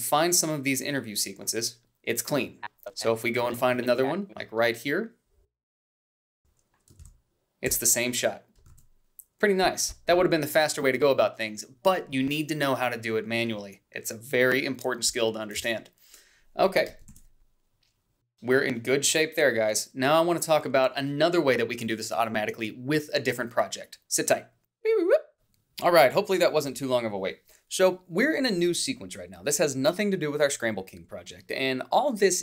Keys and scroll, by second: 6.4 a, 7.1 ctrl+b, 8.7 ctrl+s, 15.6 shift+z, 17.3 ctrl+s.